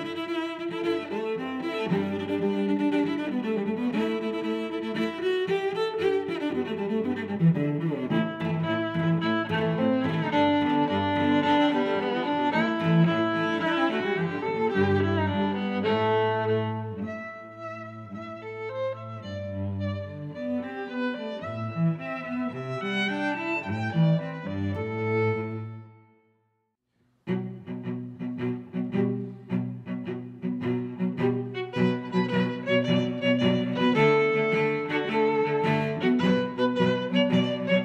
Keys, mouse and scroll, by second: 0.7 click, 1.1 middle click, 2.3 s, 6.5 click, 7.1 g, 7.3 y, 7.8 click, 8.0 middle click, 9.8 middle click, 12.7 click, 12.7 middle click, 13.1 click, 16.3 middle click, 17.7 click, 18.1 click, 18.6 middle click, 19.4 click, 21.9 click, 22.3 click, 23.4 x, 23.9 click, 25.7 click.